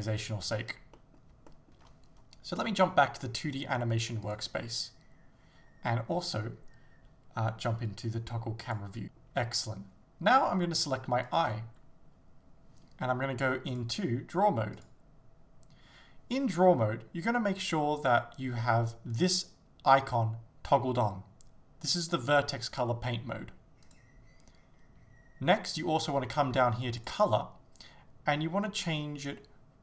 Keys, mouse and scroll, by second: 1.0-4.4 middle drag, 4.4 click, 4.9-6.0 middle drag, 9.0 shift+middle click, 11.4 click, 14.9-18.1 drag, 23.9-29.8 drag.